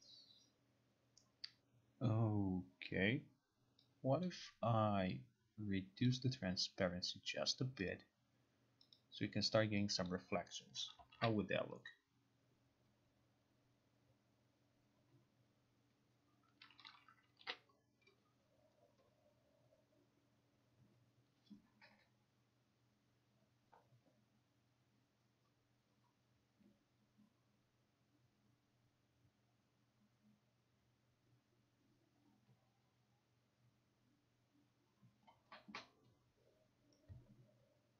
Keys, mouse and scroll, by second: 4.3 click, 6.2 click, 8.0 click, 9.0 click, 10.2 click, 11.2 ctrl+r, 17.0 click, 17.5 ctrl+r.